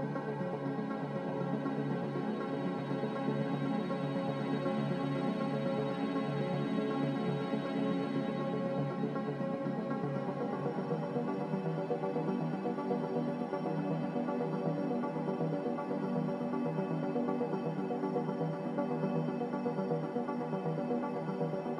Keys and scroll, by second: 6.2 a.